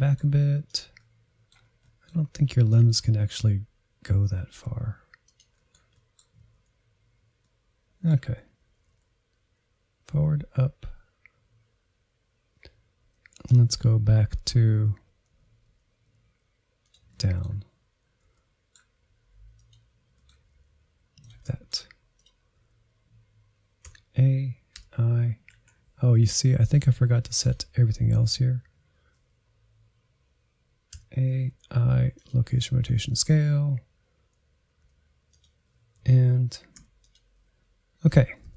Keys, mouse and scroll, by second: 0.7 click, 1.0 middle click, 1.7 click, 1.9 r, 2.6 middle click, 2.9 r, 3.1 middle click, 3.3-3.7 scroll down 1, 3.7 click, 4.0 g, 4.9 middle click, 5.2 g, 5.9 middle click, 6.5-7.2 scroll up 4, 6.6 middle click, 7.2 click, 7.3 middle click, 8.3 r, 8.7 scroll down 5, 8.9-10.1 middle drag, 10.1-13.7 drag, 13.7-14.2 Right, 14.4 Right, 14.6 Left, 15.3 click, 15.4 middle click, 16.1 g, 16.8 middle click, 17.4 g, 18.2 middle click, 18.7 g, 19.2 middle click, 19.6 g, 20.2 middle click, 20.4 r, 20.9 middle click, 21.4 click, 21.7 r, 22.4-24.0 middle drag, 24.0 a, 24.7 i, 26.2 Down, 27.4-29.7 drag, 29.9-30.5 Left, 31.0 a, 31.5 i, 33.3 Up, 34.8 i, 36.0 Up, 36.7 i, 38.1 Right, 38.3-38.5 Right.